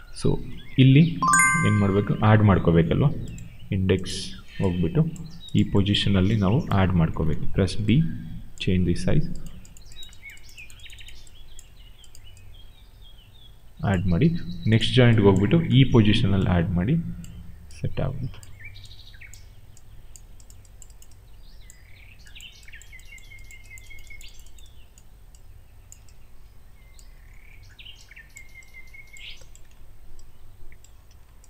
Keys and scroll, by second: 7.7 b, 31.0 w.